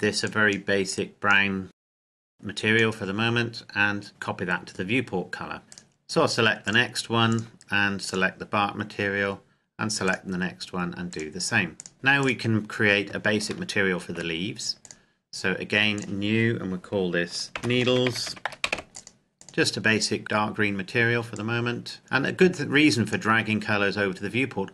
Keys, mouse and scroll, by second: 1.1 click, 5.7 right click, 6.6 click, 8.6-10.0 scroll down 1, 10.0 right click, 11.0 click, 11.9 scroll up 1, 12.2 right click, 13.6 shift+middle click, 14.8 click, 17.5-18.4 typing, 18.6 Return, 18.9 click.